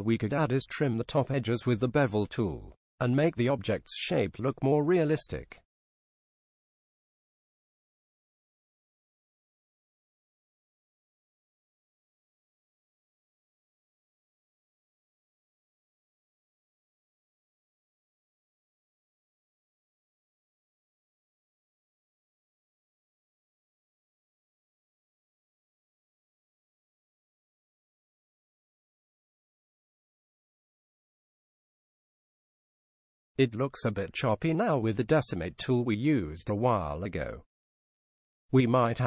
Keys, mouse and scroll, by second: 3.3 w, 19.6-21.5 drag, 26.0-27.8 drag, 30.7 middle click, 31.8-33.6 middle drag, 35.1-36.5 middle drag.